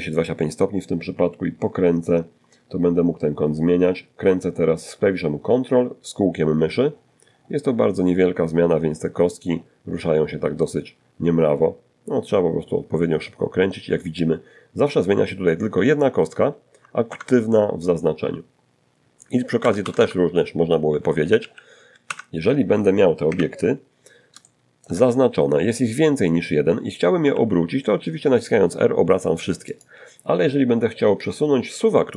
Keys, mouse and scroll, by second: 0.2-1.1 ctrl+scroll down 2, 2.0-2.3 ctrl+scroll down 1, 2.7 ctrl+scroll down 1, 2.8 ctrl+middle click, 3.5 ctrl+middle click, 3.9 ctrl+middle click, 4.3 ctrl+middle click, 4.7 ctrl+middle click, 5.5-7.4 ctrl+middle drag, 5.5-7.4 ctrl+scroll down 1, 7.4-8.0 ctrl+scroll up 2, 8.4-15.1 ctrl+scroll up 1, 15.1 ctrl+Escape, 15.1-16.0 ctrl+scroll up 1, 16.0-16.9 scroll up 1, 16.9-18.4 scroll up 1, 17.7 Escape, 18.0 Escape, 18.1 Escape, 18.4-19.0 scroll down 1, 19.0-19.6 scroll down 1, 19.6-20.2 scroll down 1, 19.6 z, 20.2 scroll up 1, 20.3 Escape, 21.5 ., 22.6 shift+middle click, 25.4 r, 27.9 click, 30.4-32.1 drag.